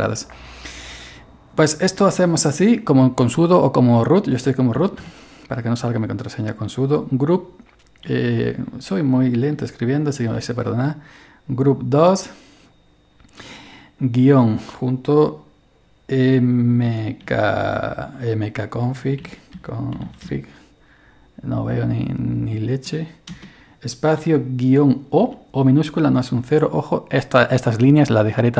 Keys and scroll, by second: 4.6-5.5 typing, 8.1 typing, 9.5-10.4 typing, 14.2 -, 16.9-17.3 typing, 19.0-20.7 typing, 25.0-25.7 typing.